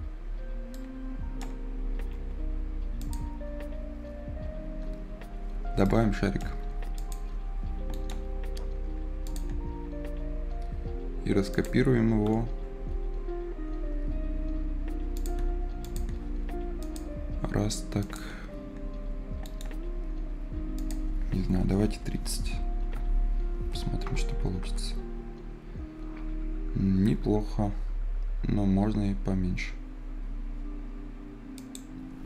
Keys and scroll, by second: 1.7 Escape, 15.6 Escape, 21.7 Return, 22.7 c, 24.0 Return, 24.5 Return.